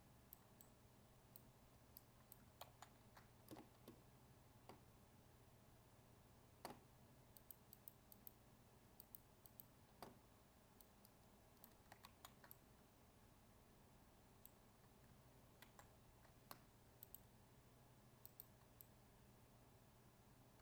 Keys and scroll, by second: 2.5 ctrl+z, 12.0 ctrl+z, 15.6 ctrl+e.